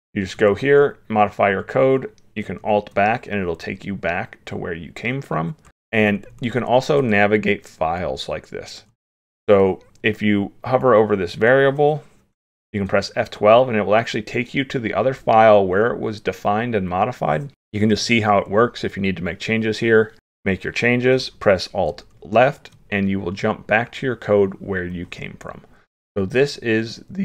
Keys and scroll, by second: 2.6 alt+Left, 21.9 alt+Left.